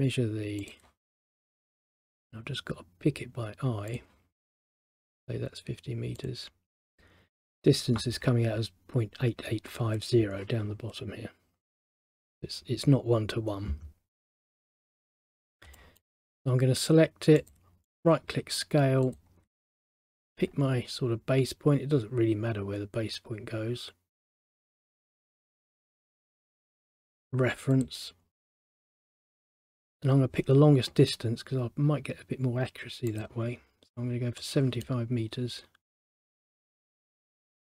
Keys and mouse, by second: 0.7 click, 4.0 click, 6.3 click, 15.1 middle click, 15.9 middle click, 17.5 click, 18.0 right click, 19.1 click, 24.9 click, 26.8 right click, 27.9 click, 29.1 middle click, 33.2 click, 34.5 middle click, 37.6 click.